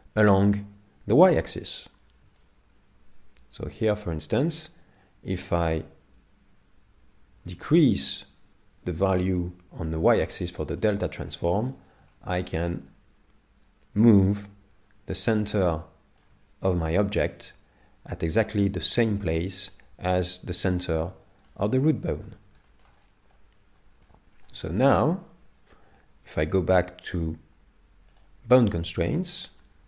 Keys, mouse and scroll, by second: 2.4 shift+click, 11.5 scroll up 7, 12.1 shift+middle click, 12.6-12.9 scroll down 4, 14.3 shift+click, 20.8 middle click, 21.9 scroll down 4, 22.7 shift+middle click, 23.3 middle click, 24.3-24.7 scroll down 3, 24.7 shift+middle click, 25.2-25.6 scroll down 2, 28.1 click, 29.1 middle click, 29.7-29.8 scroll down 3.